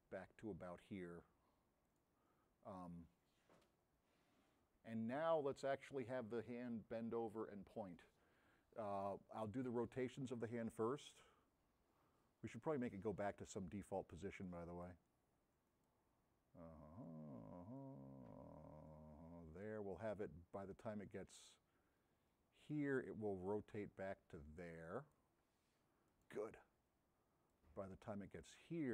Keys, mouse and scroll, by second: 11.2-12.9 drag.